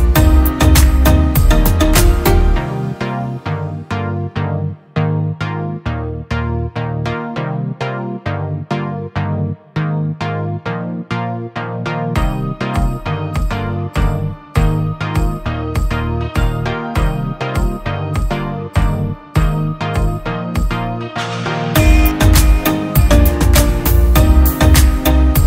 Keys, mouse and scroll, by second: 10.6 double click, 15.8 double click, 22.3 double click.